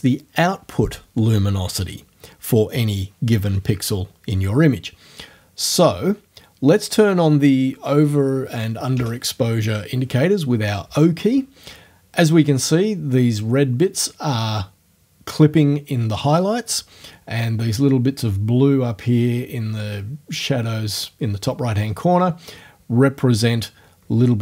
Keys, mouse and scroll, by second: 9.0 o.